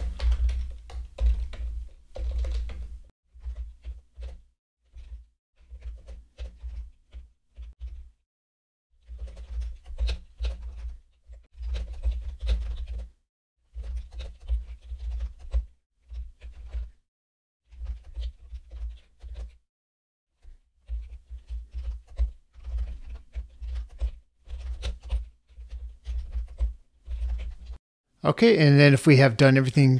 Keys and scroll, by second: 1.4 ctrl+space, 12.0 ctrl+space, 15.5 ctrl+space, 18.1 ctrl+space, 22.1 ctrl+space, 24.0 ctrl+space, 26.6 ctrl+space.